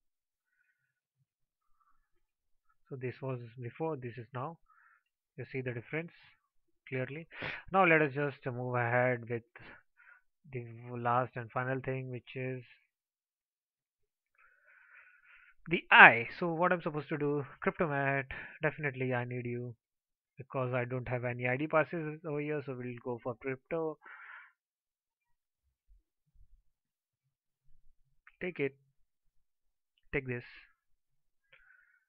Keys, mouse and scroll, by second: 7.3 alt+click.